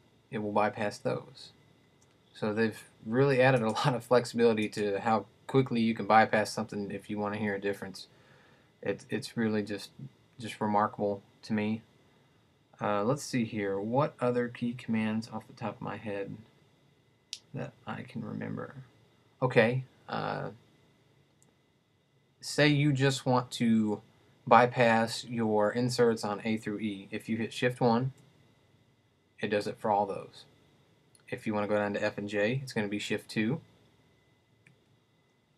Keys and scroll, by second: 28.1 shift+1, 33.6 shift+2.